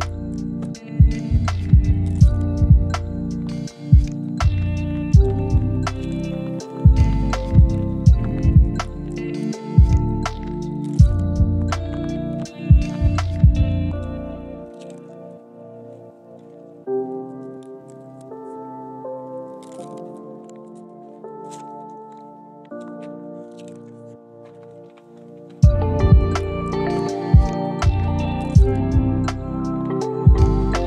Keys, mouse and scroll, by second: 0.1 scroll down 1, 0.3 shift+middle click, 0.8 scroll up 1, 1.1 shift+middle click, 1.6 scroll down 1, 1.8 shift+middle click, 2.6 scroll up 1, 2.8 middle click, 3.2 shift+middle click, 7.3 double click, 13.0 middle click, 13.3-13.7 scroll down 1, 13.8 shift+middle click, 14.4 scroll down 1, 14.8 shift+middle click, 15.0 scroll up 1, 15.2 shift+middle click, 17.4 middle click, 18.7 scroll down 1, 19.1 shift+middle click, 20.5-21.0 scroll down 1, 23.5-24.7 scroll down 1, 25.3 double click, 26.0-27.1 scroll down 1, 28.8 middle click, 29.7 s, 29.9 right click.